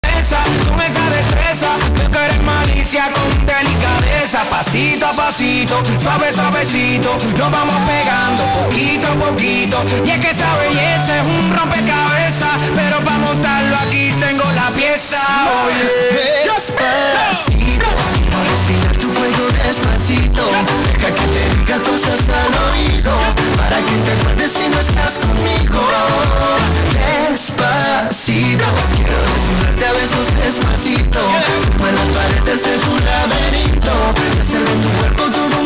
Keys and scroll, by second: 0.1 ctrl+q, 12.3 d, 13.8 Down, 14.0 Down, 14.3 Down, 14.5 Return.